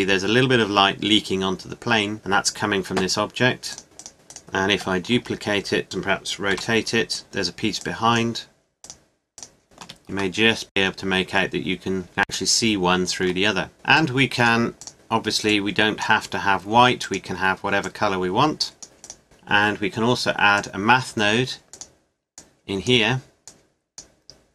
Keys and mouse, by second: 1.2 middle click, 3.1 middle click, 4.7 shift+d, 6.5 r, 7.8 click, 16.2 middle click, 19.1 click, 22.4 click.